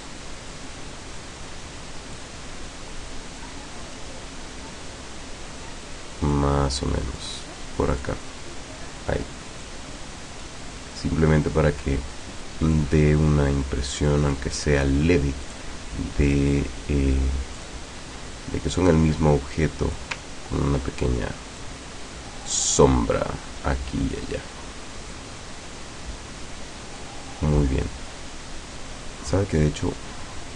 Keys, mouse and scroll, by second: 0.5-2.4 drag, 3.4-6.5 drag, 7.2 click, 7.9 click, 9.7 click, 12.8-14.6 drag, 15.5 click, 16.3 click, 17.7 click, 18.9-20.2 drag, 21.7-24.4 drag, 25.2-27.3 drag.